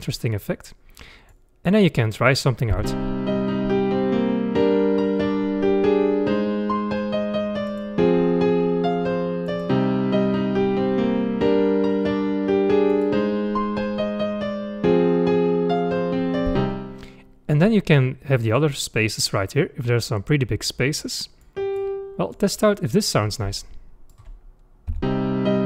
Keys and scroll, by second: 2.7 space, 16.7 space, 24.9 space.